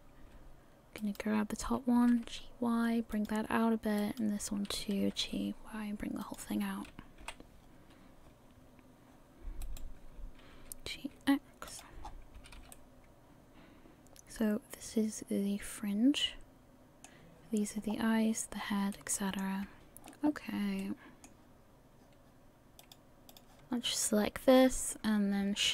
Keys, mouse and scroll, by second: 1.2 right click, 4.2 g, 5.0 g, 7.2 KP_1, 9.8 right click, 10.5 g, 12.0-12.6 scroll down 6, 12.4 a, 12.6 a, 12.7 middle click, 17.8-18.5 scroll up 1, 18.5-19.2 scroll down 6, 18.9 middle click, 20.8 middle click, 22.8 click.